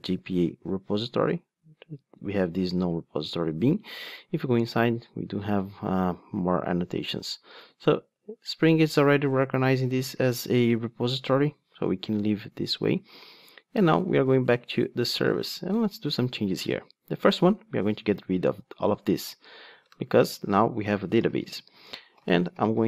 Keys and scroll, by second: 0.0 super+b, 9.3 ctrl+Tab.